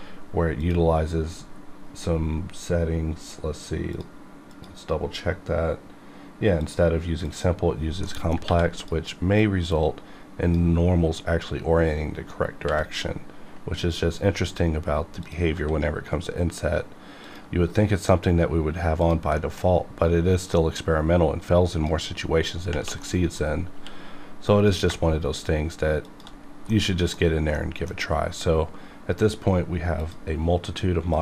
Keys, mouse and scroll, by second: 0.6 click, 1.5 scroll down 2, 3.9 click, 4.9-6.6 scroll down 1, 6.6 click, 8.0 middle click, 8.4 1, 8.8-12.6 drag, 12.6 b, 14.0 scroll up 1, 15.2 click, 15.5 s, 17.2 click, 17.4 g, 19.0 click, 19.4 middle click, 20.4-22.7 drag, 23.0 middle click, 23.4 scroll up 2, 23.7 q, 24.5 click, 26.0 shift+click, 26.4 scroll down 1, 26.7-30.0 middle drag, 30.0 click.